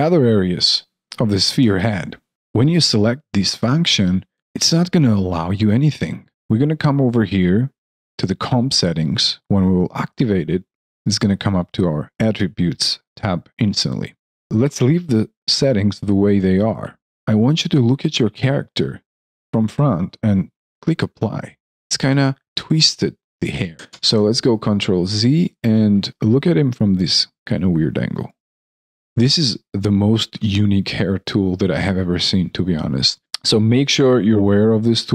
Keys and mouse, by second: 1.6 alt+click, 4.7 alt+click, 16.6 alt+click, 18.0 alt+middle click, 18.4 alt+click, 21.6 alt+click, 23.7 ctrl+z, 24.3 alt+middle click, 24.5 alt+right click, 24.9 alt+middle click, 25.6 alt+click, 26.1 alt+middle click, 28.9 alt+click, 30.0 alt+middle click, 30.3 alt+click, 32.2 alt+middle click, 33.4 alt+middle click, 33.7 alt+click.